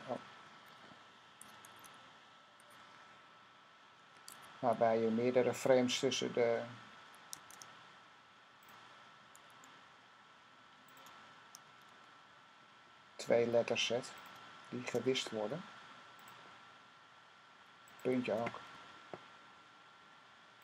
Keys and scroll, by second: 1.6 z, 4.0 F6, 7.2 F6, 9.3 F6, 11.5 F6, 14.6 F6, 18.6 F6.